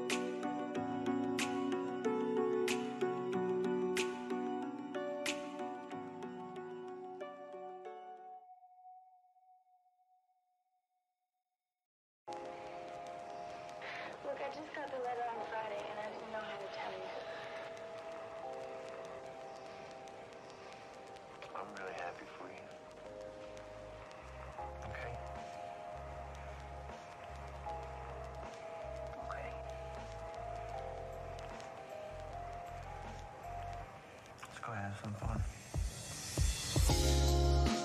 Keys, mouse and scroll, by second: 0.4 alt+click, 1.4 scroll up 1, 1.9 scroll down 1, 8.6 ctrl+z, 9.5 alt+click, 12.2 ctrl+click, 15.3 shift+click, 17.0 shift+click, 20.3 alt+click, 22.9 alt+click, 29.3 alt+middle click, 29.7 alt+middle click, 30.3 alt+click, 32.0 alt+click, 32.3 scroll down 1, 32.8 alt+middle click, 34.5 scroll up 1, 34.8 alt+click, 37.3 right click.